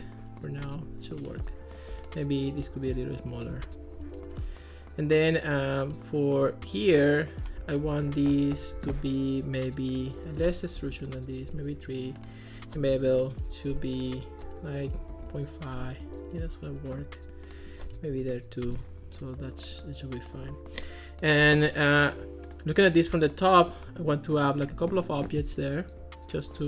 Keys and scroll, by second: 2.8 shift+c, 10.8 3, 10.9 Return, 12.9 1, 13.1 Return, 14.9 ., 15.1 5, 15.3 Return, 18.0 2, 18.2 Return.